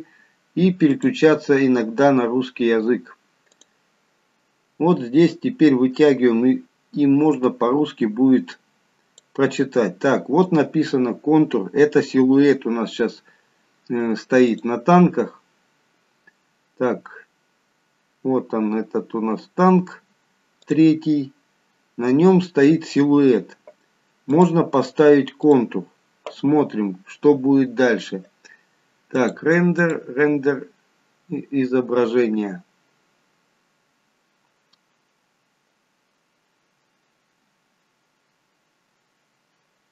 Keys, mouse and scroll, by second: 8.2 click, 14.5 click, 19.2-20.5 scroll up 4, 20.7 click, 21.1-22.0 scroll down 2, 22.0-22.7 scroll down 2, 24.3 click, 26.0 click, 29.2 click.